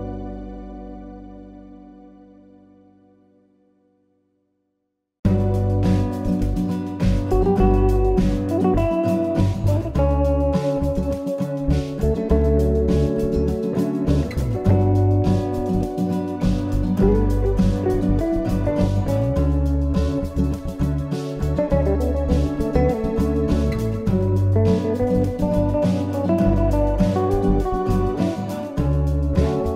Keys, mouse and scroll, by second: 4.5 click, 5.6 click, 6.3-7.3 scroll up 2, 7.3-7.7 scroll down 1, 8.6 middle click, 12.5-12.9 scroll up 2, 12.9 scroll down 1, 13.1-13.7 scroll down 6, 13.7 middle click, 13.7 scroll down 2, 19.7 KP_1, 23.1 click, 27.9 ctrl+r.